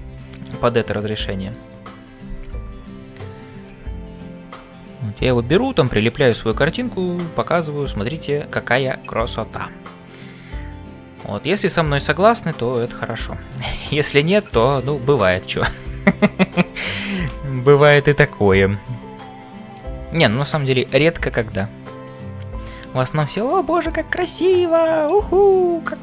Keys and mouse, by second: 0.0-26.0 typing, 1.6 click, 6.4 shift+middle click, 11.9 click, 12.8 click, 13.5 click, 22.1 click, 24.4 click.